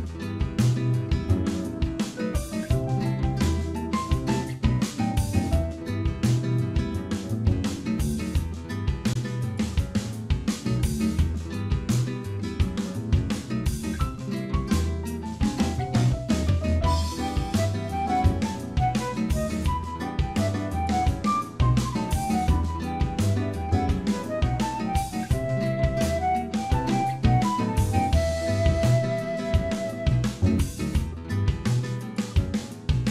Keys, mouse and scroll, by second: 0.7 middle click, 1.0-1.6 scroll up 10, 1.6 middle click, 4.4 click, 9.4 click, 10.2 scroll down 2, 10.5 middle click, 12.1-13.1 scroll down 8, 13.1 middle click, 14.4 shift+middle click, 15.1 click, 15.4 Tab, 15.6 middle click, 17.4 click, 18.2 click, 18.9 ctrl+click, 19.0 ctrl+click, 19.4 middle click, 19.9 shift+middle click, 20.2-20.8 scroll up 3, 20.6 middle click, 24.3 shift+d, 25.8 p, 26.6 Tab, 26.9 click, 27.4 click, 28.7 Tab, 29.4 a, 30.5 click, 32.4 middle click, 33.0 shift+middle click.